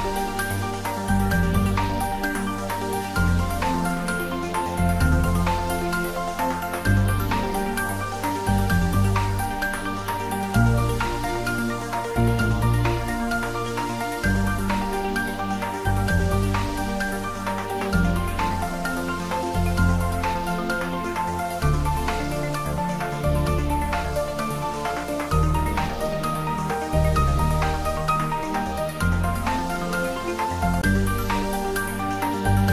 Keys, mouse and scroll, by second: 6.0-7.9 scroll up 1, 8.9-11.0 scroll down 1, 15.5 click, 19.1 scroll down 1, 19.2-21.3 scroll up 1, 21.3 scroll down 1, 22.8-27.4 drag, 27.4-30.0 scroll down 1, 32.4 click.